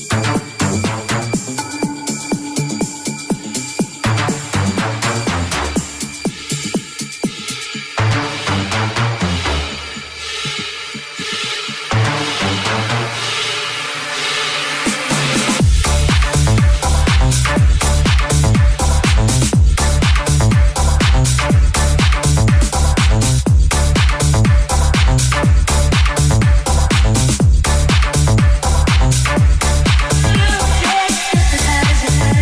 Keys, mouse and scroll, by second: 1.7-4.6 middle drag, 2.5 alt+z, 3.3 shift+click, 3.3 g, 4.0 alt+z, 4.6-6.2 shift+drag, 5.1 middle click, 5.1 right click, 6.0 g, 6.8 middle click, 6.8 g, 7.3 right click, 7.4-10.2 middle drag, 8.8 Tab, 10.3-12.3 middle drag, 12.3 click, 12.3-14.2 shift+middle drag, 14.3 shift+middle click, 14.9-19.5 middle drag, 16.6 right click, 16.9 Tab, 17.9 alt+z, 19.5 alt+right click, 19.5-20.9 alt+middle drag, 20.4 alt+z, 20.8 3, 20.9 click, 20.9-32.4 alt+middle drag, 21.1 alt+z, 22.1 i, 23.6 i, 24.5 alt+z, 26.3 alt+z, 28.3 i, 29.5 Tab, 30.2 1, 30.8 s.